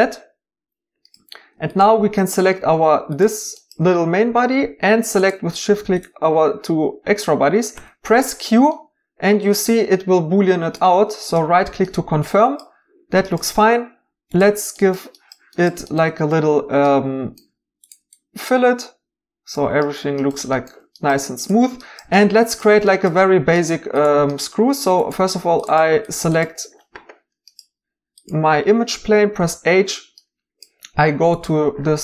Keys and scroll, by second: 7.7 q, 25.4 Tab, 29.4 h.